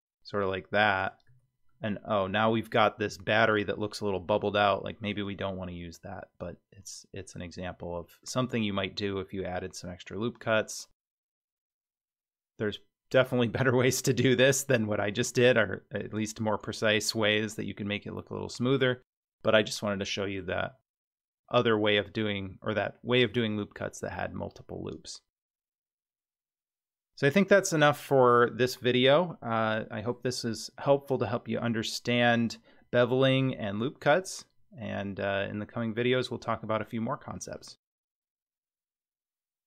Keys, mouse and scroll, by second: 1.3 Tab, 1.7-4.6 middle drag, 4.6 scroll down 1, 5.2-7.3 middle drag, 5.2-5.8 scroll down 2, 7.6-8.2 scroll up 4, 8.4 Tab, 9.8-10.4 scroll down 2, 10.4 middle click, 11.7 click, 19.5 middle click, 20.6 Tab, 21.6 Tab, 26.7 Tab, 35.6-37.6 middle drag.